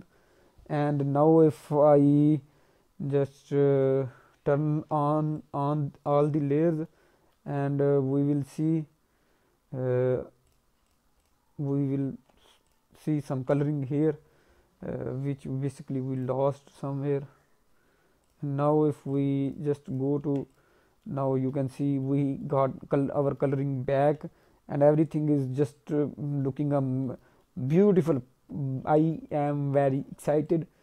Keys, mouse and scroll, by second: 0.3 scroll up 2, 3.1 ctrl+Tab, 4.1-5.1 scroll up 3, 5.3 shift+click, 6.8 alt+middle click, 7.5 middle click, 10.1-10.4 scroll up 2, 10.4 click, 10.8 click, 11.2 click, 12.0 ctrl+Tab, 12.6 click, 13.2 ctrl+Tab, 13.8-15.8 scroll down 12, 16.1 click, 18.2 click, 19.0 click, 19.4 click, 19.9 click, 20.2 ctrl+Tab, 20.4 click, 21.0 middle click, 21.1 scroll down 1, 21.3 alt+middle click, 22.0 middle click, 22.4 alt+middle click, 22.8-23.2 scroll up 2, 23.2 middle click, 23.5 alt+middle click, 24.2 middle click, 24.6 scroll up 1, 24.7 middle click, 25.1 alt+middle click, 25.6-26.0 scroll up 2, 26.4 middle click, 26.8-27.4 scroll down 3, 27.0 middle click, 27.4 alt+middle click, 27.8 middle click, 28.9 alt+middle click, 29.2 scroll down 1, 29.2 middle click, 29.7 middle click, 30.4 alt+middle click, 30.4 click.